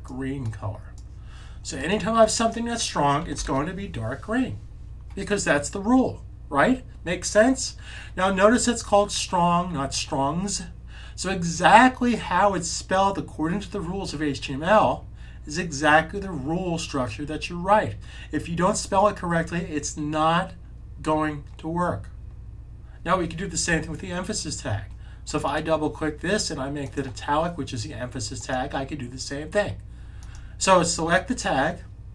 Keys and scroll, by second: 3.2 s.